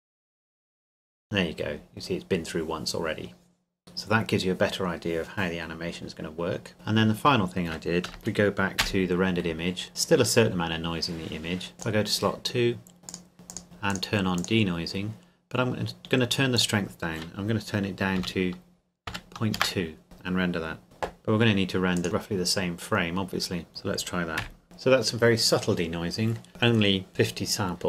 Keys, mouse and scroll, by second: 6.7 middle click, 8.1 KP_0, 8.8 F11, 9.8-11.5 scroll up 1, 11.7 click, 13.3-13.8 scroll down 2, 13.5 click, 18.2 KP_Decimal, 19.1 KP_2, 19.6 KP_Enter, 21.7 Escape, 22.0 click, 23.7 click, 24.4 F12, 26.5 click, 27.1 scroll up 1.